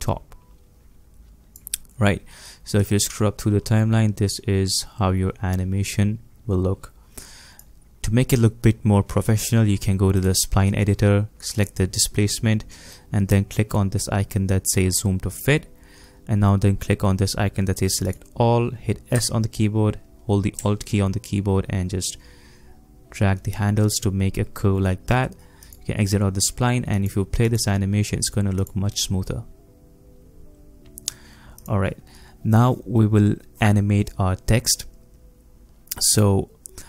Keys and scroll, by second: 19.2 s.